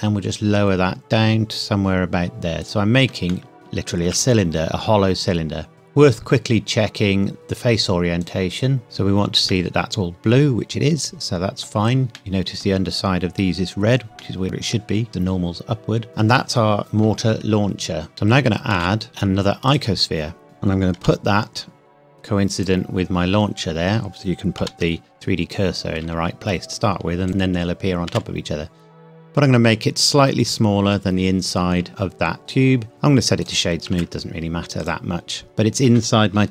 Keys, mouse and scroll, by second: 2.6 click, 3.3 middle click, 3.5 Tab, 4.0 z, 5.7 click, 8.2 click, 9.5 middle click, 18.1 shift+Num_Lock, 18.1-18.7 scroll up 1, 18.7 shift+a, 19.7 click, 20.3 scroll down 1, 20.4 click, 21.0 g, 22.6 click, 22.9 scroll up 1, 24.6 g, 27.3 shift+click, 28.1 s, 30.5 click, 32.9 right click, 33.4 click, 33.9 z, 34.8 click, 35.5 middle click, 36.4 KP_1.